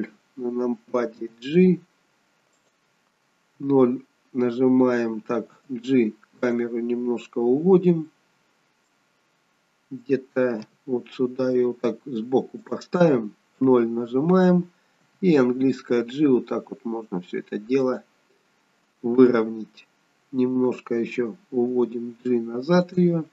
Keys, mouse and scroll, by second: 1.2 g, 3.6 KP_0, 5.6 g, 7.5-8.2 scroll down 2, 8.2 middle click, 10.6 g, 13.6 KP_0, 15.0 g, 19.2 KP_0, 21.8 g.